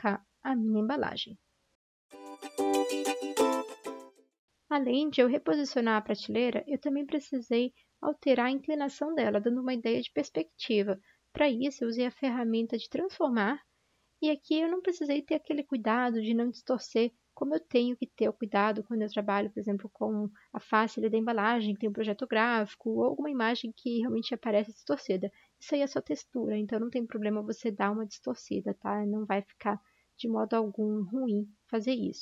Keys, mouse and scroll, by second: 0.0-0.6 typing, 1.9-4.1 typing, 4.0 ctrl+-, 4.4 ctrl+-, 5.2 v, 7.4 ctrl+t, 7.5 v, 23.2 a.